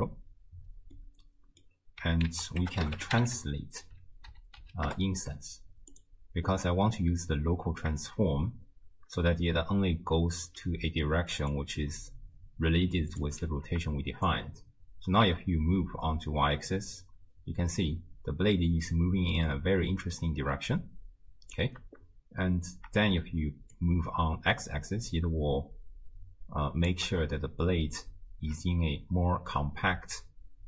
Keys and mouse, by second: 1.0 click, 1.0 right click, 2.3 ctrl+a, 10.2 middle click, 11.6-13.3 drag, 14.3-21.6 shift+drag, 23.7-26.9 shift+drag.